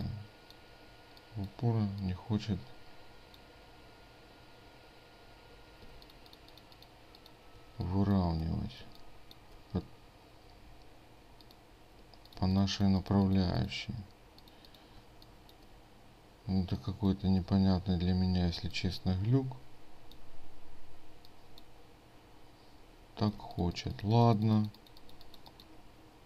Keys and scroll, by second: 6.0 ctrl+space, 8.9 ctrl+space, 16.7 ctrl+space, 23.5 ctrl+alt+space.